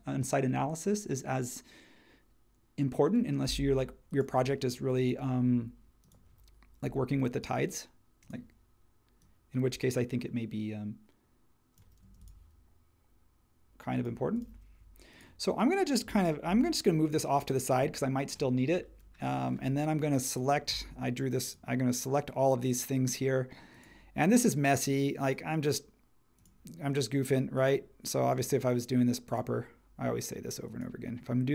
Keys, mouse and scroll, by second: 12.0 space.